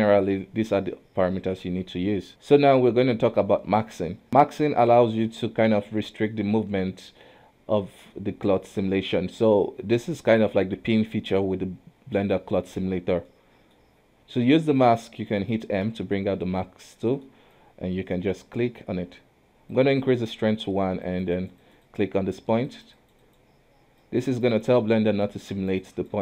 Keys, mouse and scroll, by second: 2.3-8.4 middle drag, 10.1-13.1 middle drag, 13.3-14.9 middle drag, 14.9 f, 15.8 m, 17.0 middle click, 17.5-26.2 drag.